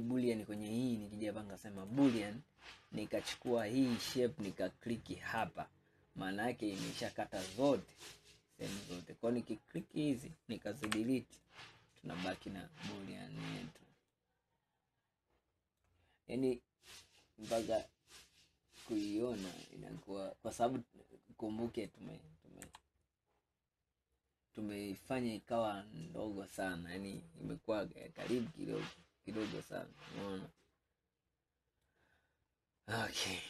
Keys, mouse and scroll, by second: 1.9-3.6 drag, 8.0-9.9 drag, 10.9 Delete, 11.5-12.7 middle drag, 12.7-14.2 scroll up 8, 14.2-16.2 middle drag, 16.2-16.8 scroll up 2, 17.2-17.7 scroll up 2, 17.7-20.8 middle drag, 22.7 KP_3, 24.0-24.5 scroll up 1, 24.5-25.0 scroll up 1, 26.9 scroll down 2, 27.5 scroll down 3, 28.1-31.2 middle drag, 32.3-32.9 scroll down 2, 32.9-33.4 scroll down 9.